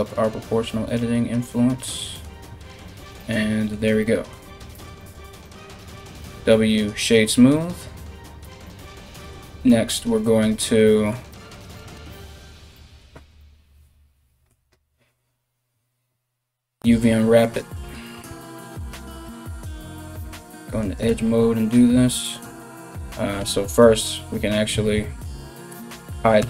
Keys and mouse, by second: 4.4 Tab, 5.8 w, 8.1 Tab, 17.1 alt+right click, 18.2 alt+shift+right click, 19.9 2, 20.4 right click, 23.0 l, 24.3 a, 24.6 a, 25.4 l, 26.0 h.